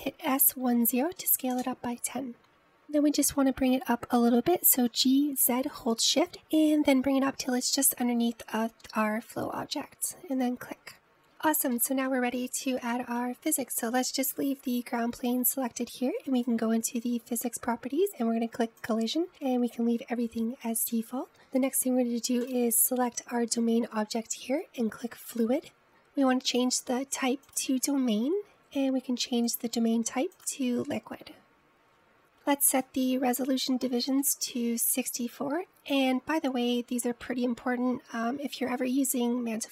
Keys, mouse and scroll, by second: 1.2 s, 3.3-4.1 middle drag, 4.1-5.8 scroll up 2, 5.8 g, 12.3-12.8 scroll down 2, 12.8-17.0 middle drag, 17.5 click, 19.5-22.2 drag, 23.6 click, 27.6-32.1 drag, 33.8-36.9 drag.